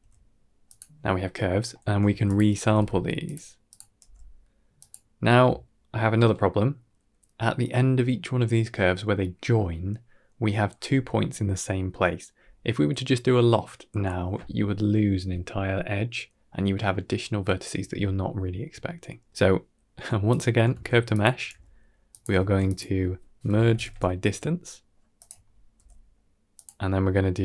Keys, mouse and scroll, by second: 1.6 middle click, 2.0 shift+a, 3.9 g, 18.7 scroll down 2, 19.0 middle click, 20.1 click, 20.6 shift+d, 21.4 g, 22.2 shift+a, 25.6 g.